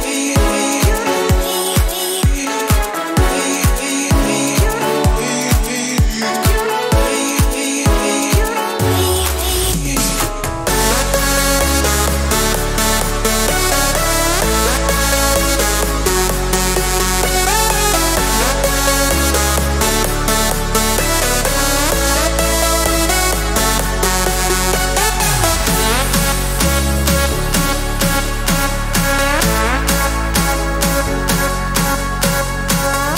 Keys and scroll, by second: 14.9-16.0 typing, 17.6 Escape, 24.2-26.7 typing.